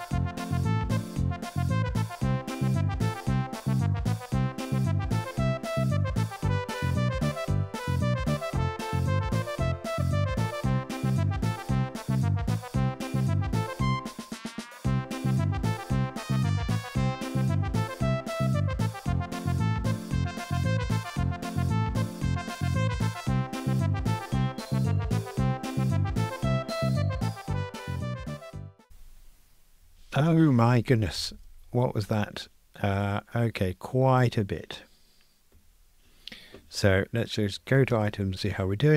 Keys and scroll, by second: 0.2 super+BackSpace, 0.9 ctrl+r, 1.1 alt+Return, 1.7 super+c, 1.8 super+v, 2.4 Escape, 3.3 Escape, 3.8 Escape, 3.8 ctrl+r, 4.0 alt+Return, 4.5 super+c, 4.6 super+v, 5.0 super+BackSpace, 5.1 ctrl+r, 5.5 ctrl+r, 5.7 alt+Return, 6.0 super+c, 6.1 super+v, 6.6 super+BackSpace, 6.8 alt+shift+Left, 6.9 Delete, 7.0 ctrl+shift+j, 7.1 ctrl+r, 8.9 super+b, 9.3 super+[, 9.5 super+b, 9.9 Escape, 10.5 Return, 10.6 ctrl+r, 10.9 super+[, 11.3 super+BackSpace, 11.6 super+F9, 12.0 super+F9, 12.2 super+BackSpace, 12.3 super+F9, 12.7 Escape, 12.8 Return, 12.9 super+F9, 13.2 Escape, 13.6 ctrl+r, 14.3 Escape, 14.7 Return, 14.8 alt+shift+Right, 14.9 Delete, 14.9 super+F9, 15.3 alt+shift+Right, 15.4 alt+shift+Left, 15.5 Escape, 15.8 super+c, 15.9 super+v, 16.6 Escape, 16.8 ctrl+r, 17.1 Escape, 17.2 super+BackSpace, 17.8 Return, 18.3 Escape, 18.5 alt+shift+Left, 18.5 alt+shift+Right, 18.6 Delete, 18.8 super+F9, 19.1 Delete, 19.4 alt+Up, 19.6 Escape, 19.7 ctrl+r, 20.0 super+BackSpace, 20.2 ctrl+r, 20.5 Escape, 20.7 Return, 20.8 Escape, 21.2 alt+shift+Left, 21.3 super+z, 21.6 Escape, 21.7 alt+shift+Left, 21.9 Escape, 22.0 alt+super+l, 22.2 ctrl+r, 22.3 alt+Up, 22.6 Escape, 22.9 ctrl+r, 23.3 Escape, 23.7 Escape, 24.0 alt+shift+Left, 24.0 Escape, 24.1 alt+shift+Left, 24.2 Escape, 24.3 alt+Up, 24.4 Escape, 24.5 Tab, 24.7 super+F9, 25.4 Escape, 25.5 super+F9, 25.8 Escape, 26.5 Escape, 26.7 super+F9, 26.9 Escape, 27.2 Escape, 27.3 super+F9, 27.7 Escape, 28.1 super+c, 28.1 super+v, 28.3 Tab, 28.3 Escape, 28.5 ctrl+r, 28.8 ctrl+r, 31.2 super+k, 38.1 super+d.